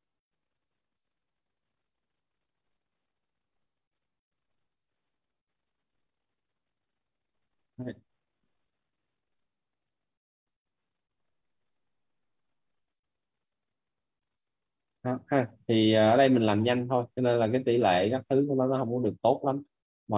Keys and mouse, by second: 9.9 click, 12.5 click, 13.0 click, 14.5 right click, 15.8 right click, 17.3 click, 18.2 right click, 19.3 right click.